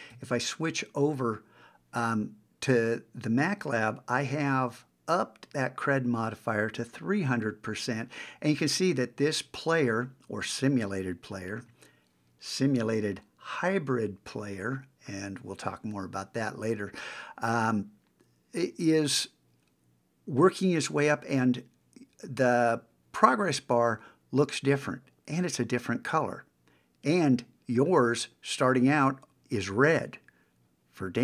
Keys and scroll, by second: 0.1 super+Tab.